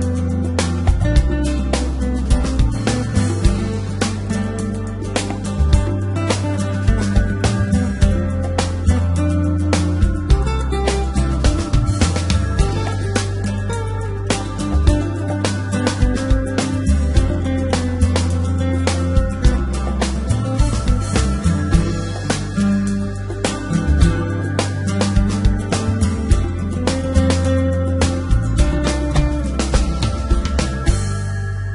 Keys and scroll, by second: 0.8 Down, 2.5 Return, 4.0 g, 4.1 x, 6.2 s, 6.4 z, 10.6 r, 12.4 y, 13.7 9, 14.3 0, 15.5 Return, 16.8 g, 17.3 y, 19.0 s, 21.7 3, 24.4 z, 25.2 g, 25.3 z, 26.9 g, 27.2 y, 28.6 s, 30.5 g, 30.6 y, 31.4 z.